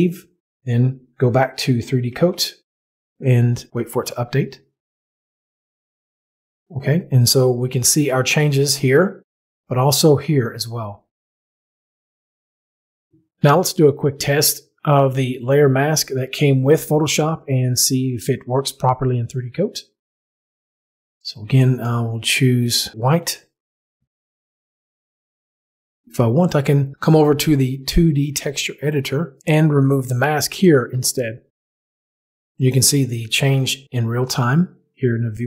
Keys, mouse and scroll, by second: 2.1 alt+Tab, 2.7 click, 2.8 middle click, 3.2 middle click, 16.0 click, 22.9 click, 24.3 right click, 27.1 middle click, 29.5 click, 30.9 click.